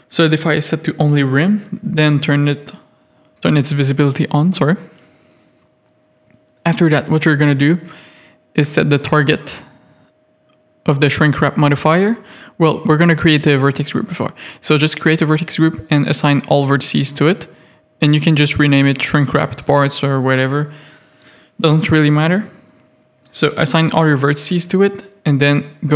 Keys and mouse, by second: 8.9 click, 9.6 middle click, 11.1 click, 12.8 Tab, 12.8 a, 13.8 click, 15.7 click, 19.9 p, 23.4 Tab.